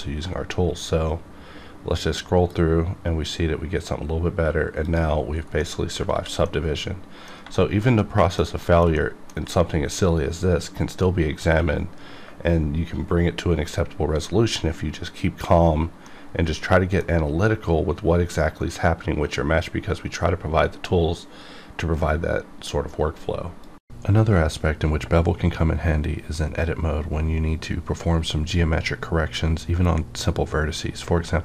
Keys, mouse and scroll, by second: 4.8 click, 5.2 scroll down 1, 5.6 middle click, 6.1 alt+a, 6.5 middle click, 7.5 shift+middle click, 7.8 shift+scroll down 1, 8.0 middle click, 8.6 shift+middle click, 8.7 shift+middle click, 9.0-11.8 middle drag, 16.1-19.5 middle drag.